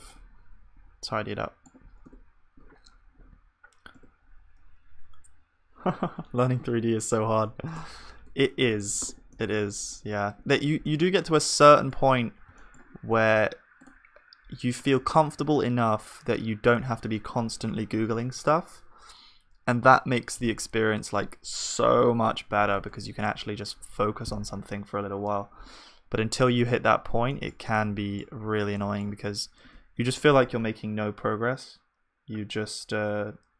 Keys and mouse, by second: 2.1 Tab, 6.2 Tab, 6.2 F3, 8.2 Tab, 8.7 ctrl+s, 9.0 Tab, 9.3-33.5 middle drag, 14.8-22.9 drag, 25.0 z, 29.7 g.